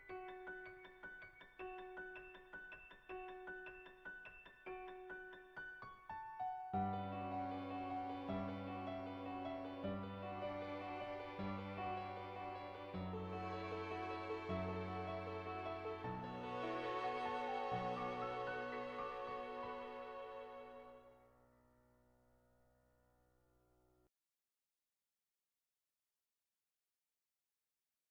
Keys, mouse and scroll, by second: 2.4 click, 4.4 click, 5.9 click, 7.0 middle click, 7.4 click, 7.7 shift+a, 9.6 click, 10.2-15.0 drag, 15.6 click, 15.6 right click, 16.1 click, 16.1 right click, 16.8 click, 17.7 click, 18.5 click.